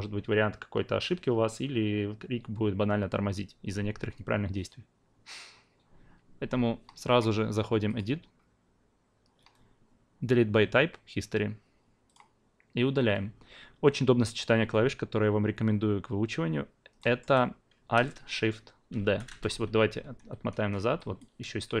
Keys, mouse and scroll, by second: 7.8 click, 12.0 click, 17.0 alt+middle click, 18.9 alt+shift+d, 21.0-21.8 alt+drag.